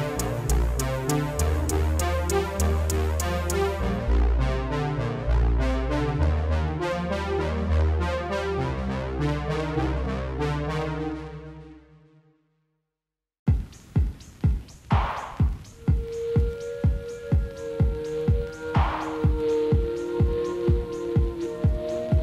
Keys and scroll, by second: 7.5 ctrl+s.